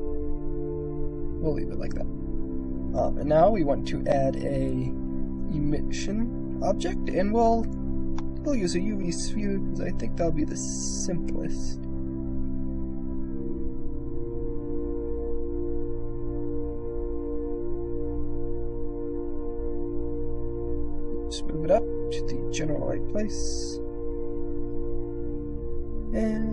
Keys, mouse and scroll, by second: 1.0 click, 1.4 middle click, 2.4-3.9 middle drag, 4.1 shift+a, 7.9 click, 9.1 g, 10.5 click, 11.0 s, 12.2 g, 17.1 KP_Decimal, 17.9 click, 18.6 click, 19.2 g, 21.0 click, 21.7 s, 22.4 click, 22.9 g, 25.6 click.